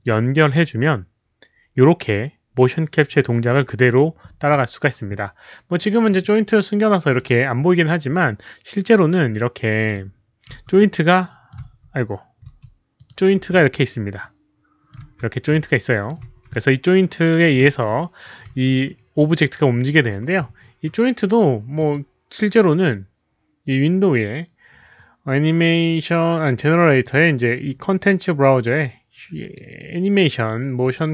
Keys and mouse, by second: 0.4 alt+middle click, 3.7 click, 6.0 click, 7.0 click, 9.7 click, 10.5 w, 10.7-11.5 middle drag, 11.5 click, 12.3-13.9 typing, 12.5 middle click, 12.9 click, 13.5-14.9 middle drag, 14.9 z, 15.5-16.0 middle drag, 16.2 z, 16.5-17.5 middle drag, 17.2-20.3 typing, 17.5 click, 18.5 middle click, 19.8 middle click, 21.7 click, 24.2 middle click, 27.0 click, 29.4 click, 30.8 click.